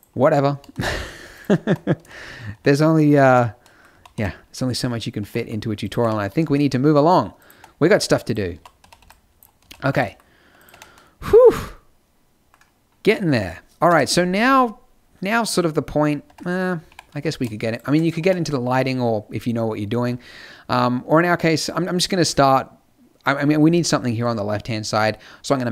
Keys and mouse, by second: 1.6 Tab, 2.0 z, 2.5 Tab, 3.2 Tab, 3.9 a, 4.1 b, 5.1 g, 6.0 Tab, 6.3 z, 7.4 right click, 7.5 Tab, 8.3 click, 8.5-9.9 typing, 9.9 click, 10.6 Tab, 13.8 KP_0, 16.2 Tab, 16.8 g, 18.1 Tab, 19.9 a.